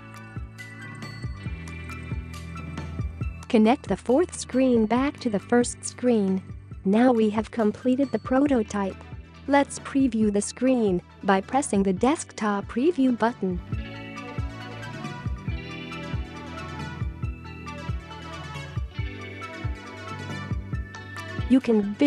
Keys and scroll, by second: 6.3 ., 7.4-8.1 typing.